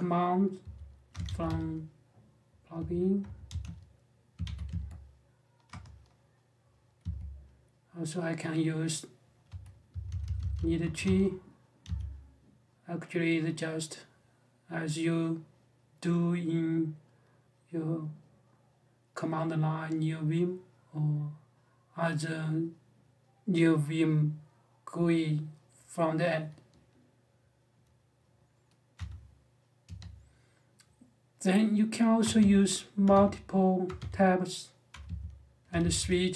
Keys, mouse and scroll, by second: 0.4-4.7 typing, 5.4 Return, 6.8 q, 9.0-11.6 typing, 28.7 space, 29.6 Escape, 32.0 space, 32.8 space, 33.6 space, 34.7-36.3 typing.